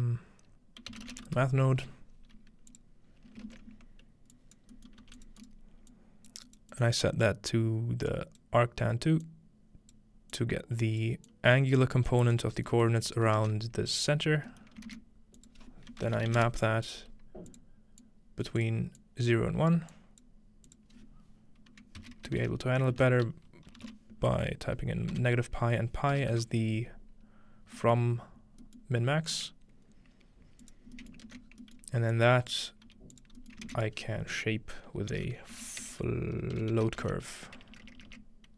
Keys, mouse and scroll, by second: 0.8-1.6 typing, 2.7-3.1 drag, 3.1-5.4 scroll up 3, 3.5 typing, 3.8-12.4 drag, 4.7-5.9 middle drag, 5.0 g, 12.5-12.9 scroll down 2, 13.4 ctrl+space, 14.7-16.3 shift+middle drag, 14.9-16.8 typing, 15.4 click, 17.5 click, 18.0-19.7 drag, 19.9-22.0 drag, 22.0-23.8 typing, 25.1 typing, 26.1 BackSpace, 28.0 middle click, 28.8-30.6 middle drag, 30.6-31.6 drag, 31.2 middle click, 31.3 ctrl+space, 31.4-32.1 scroll down 2, 31.8 click, 32.9-38.5 typing, 33.4 click, 33.8 shift+click.